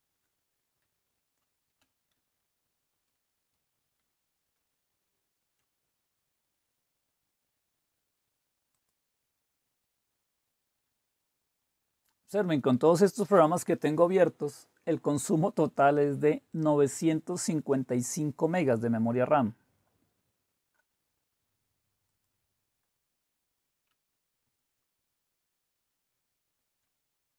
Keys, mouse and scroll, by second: 0.8 super+8, 2.1 super+9, 2.9 super+8, 3.5 super+7, 4.0 super+8, 4.5 super+9, 8.7 click, 27.0-27.3 drag.